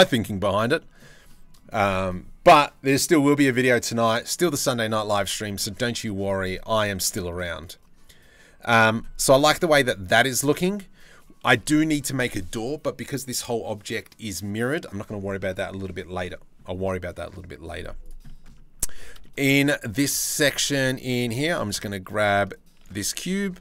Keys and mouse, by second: 0.4 click, 0.7 Tab, 0.9-1.2 drag, 5.1 click, 5.8 click, 6.4 drag, 6.8-8.5 shift+middle drag, 9.1 click, 17.8 drag, 18.5 Tab, 18.8 shift+middle click, 20.4 Tab, 20.7 Tab, 21.0 3, 22.6 shift+d, 23.4 p.